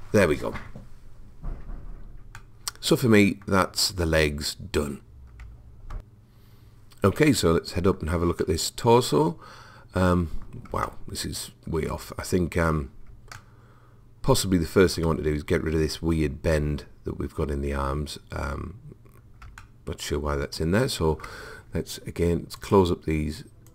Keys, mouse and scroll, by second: 2.4-4.4 middle drag, 7.2 middle click, 7.6-10.0 middle drag, 10.4 middle click, 12.2 middle click, 12.4 middle click, 13.3 middle click, 14.2-15.3 middle drag, 18.7-21.4 middle drag, 22.6-23.7 drag.